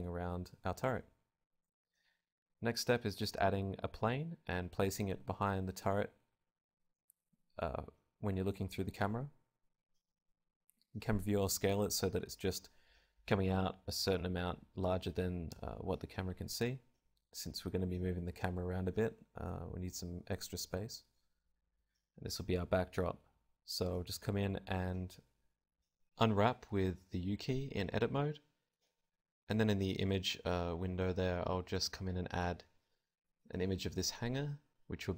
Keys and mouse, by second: 0.0 Escape, 1.3-5.5 typing, 2.6 click, 3.2 click, 5.5 click, 6.6 s, 7.8 click, 8.9 click, 8.9-11.2 typing, 9.7 click, 10.8 click, 12.7 g, 13.0 click, 14.1 middle click, 14.9-17.0 drag, 18.0 click, 18.9 n, 19.1 n, 20.2 t, 21.5-23.4 drag, 23.7 Tab, 23.9 a, 24.0 a, 24.9 u, 26.5 click, 28.9-30.0 drag, 29.7-32.1 middle drag, 30.0 alt+z, 30.9 a, 31.2 a, 31.2 r, 32.6-33.9 drag, 32.6 s, 33.4 s, 33.9 Tab, 34.3 KP_0.